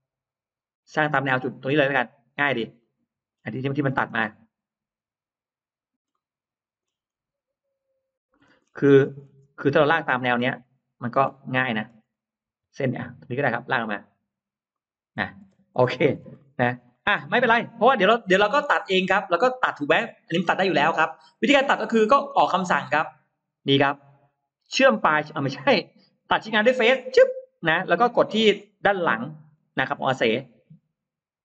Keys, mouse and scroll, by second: 0.4-0.7 scroll up 2, 1.2 scroll down 2, 1.8-2.8 scroll up 2, 2.7 middle click, 3.6-4.3 scroll up 2, 5.9 middle click, 5.9-6.3 scroll up 2, 6.9-7.2 scroll up 2, 8.2-10.2 scroll down 5, 9.7 middle click, 10.5 middle click, 10.9-11.5 scroll down 2, 11.7 scroll up 1, 13.3 click, 14.5 click, 15.3-15.6 scroll up 1, 15.4 space, 15.6 middle click, 15.9 scroll down 1, 16.2 middle click, 16.2 scroll up 1, 16.4 scroll down 1, 16.7 middle click, 16.7-18.2 scroll up 3, 18.4-18.7 scroll down 1, 19.0 scroll up 1, 21.2 click, 26.8 click, 27.9 middle click, 28.7 middle click, 29.1-29.9 scroll up 4.